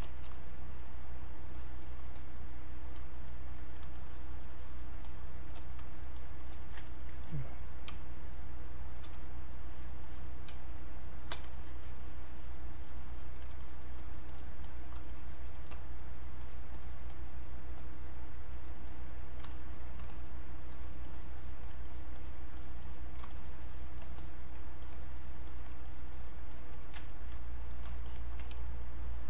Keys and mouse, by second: 0.0 click, 0.8 click, 1.5 alt+click, 2.1 click, 3.4 alt+click, 4.0 shift+click, 5.1 click, 5.6 shift+click, 6.2 click, 6.5 alt+click, 6.8 ctrl+alt+right click, 7.3 ctrl+click, 7.9 ctrl+space, 8.3 ctrl+click, 8.4 ctrl+space, 9.1 ctrl+click, 10.5 ctrl+space, 10.8 ctrl+click, 11.0 ctrl+space, 11.5 ctrl+alt+click, 14.6 click, 15.1 shift+click, 16.4-24.2 drag, 24.2 click, 27.1 ctrl+right click, 27.6 click, 28.1 alt+click, 28.5 space.